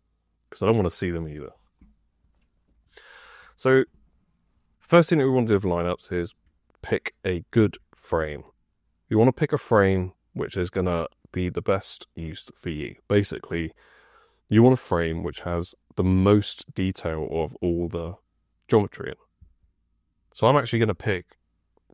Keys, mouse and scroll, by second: 7.4 F2.